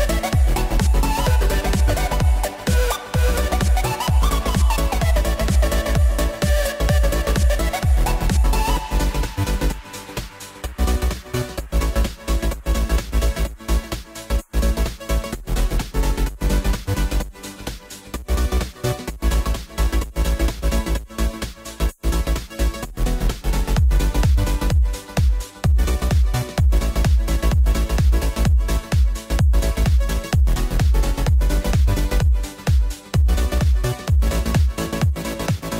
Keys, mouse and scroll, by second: 0.7-3.3 drag, 3.3 h, 4.4 g, 6.7 click, 7.5 g, 9.6 click, 10.2 g, 12.0-13.6 middle drag, 13.6 ctrl+alt+KP_0, 15.5 g, 17.4 click, 18.5 KP_1, 19.1-19.6 scroll down 9, 20.3 shift+a, 28.9-30.1 drag, 30.1 s, 35.2-35.7 drag.